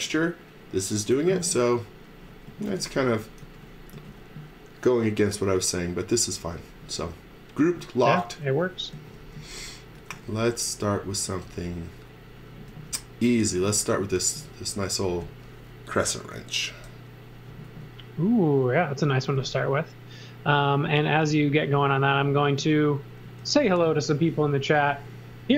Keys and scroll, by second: 1.4 e, 2.5-4.9 typing, 6.4 space, 7.4-9.9 typing, 11.2 x, 12.6 x, 13.5 space, 17.6 c, 23.2 x, 23.9 z, 24.6 x.